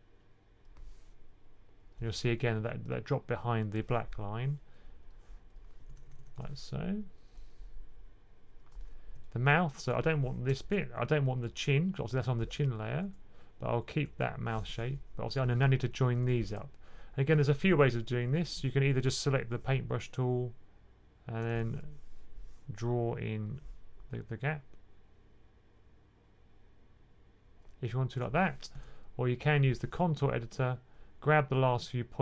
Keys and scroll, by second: 2.3 typing, 5.5-6.3 typing, 15.8-16.4 typing, 21.6 super+z, 28.6 super+z.